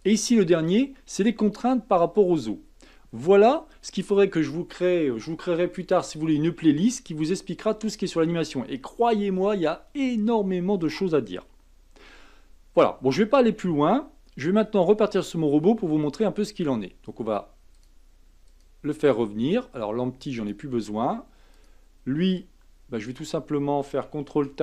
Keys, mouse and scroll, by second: 0.0 click, 17.7 click, 18.5 click, 20.4 click, 21.5 click, 23.1 click, 24.3 ctrl+Tab.